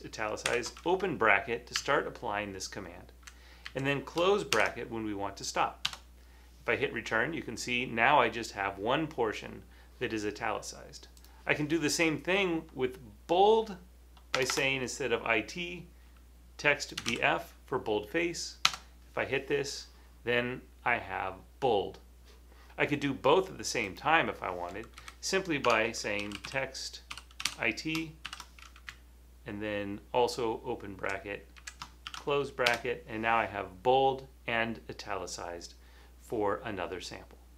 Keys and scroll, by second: 0.0-3.1 typing, 1.8 Right, 3.0 Right, 3.0 Right, 3.1 Right, 3.2 Right, 3.7 Right, 4.4 typing, 5.9 Return, 7.1 typing, 9.0 typing, 14.5 BackSpace, 16.9-17.7 typing, 18.9 Return, 25.1 Left, 25.7-28.3 typing, 28.9 Right, 29.4 Right, 29.9 Right, 30.4 Right, 30.5-32.1 typing, 32.7 Return, 35.5-36.3 typing.